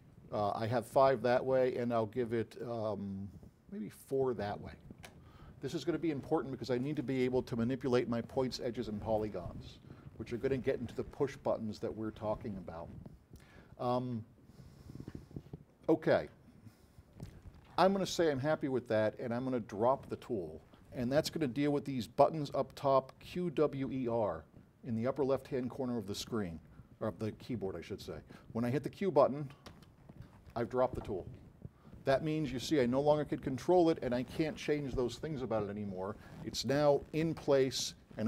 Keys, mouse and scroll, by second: 2.8-4.3 drag, 29.7 q.